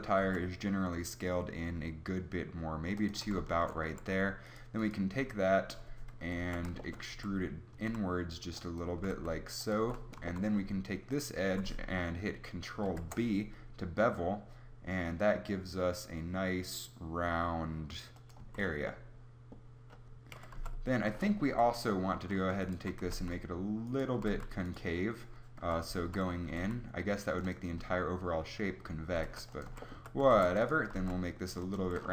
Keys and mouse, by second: 0.3 s, 3.9 a, 6.2 KP_3, 6.4 z, 7.2 e, 9.0 g, 9.8 z, 12.9 ctrl+b, 18.4 Tab, 20.3 KP_3, 20.5 z, 21.0 Tab, 21.5 z, 23.0 g, 24.2 g, 25.6 KP_3, 26.0 z, 26.4 g, 29.1 g, 29.7 a, 29.9 z, 30.3 ctrl+r, 30.8 g, 31.8 Tab.